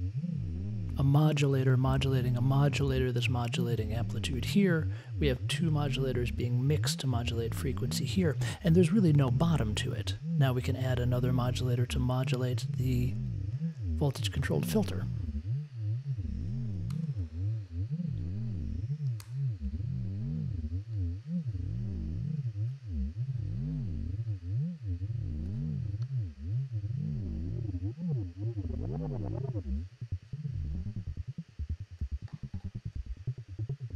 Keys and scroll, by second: 16.9 super+c, 17.1 super+v, 19.2 super+v.